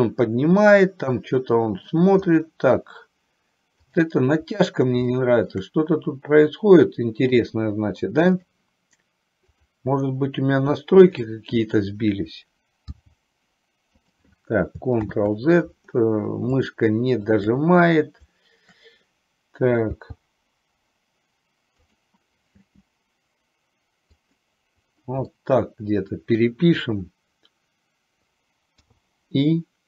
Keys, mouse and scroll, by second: 0.8-2.0 middle drag, 2.5 middle click, 3.9 click, 5.3 shift+middle click, 7.5-8.8 drag, 9.6 click, 11.1 shift+click, 13.1 g, 15.3 ctrl+z, 17.4 shift+click, 20.1 g, 22.8 r, 25.5 middle click, 29.0 i.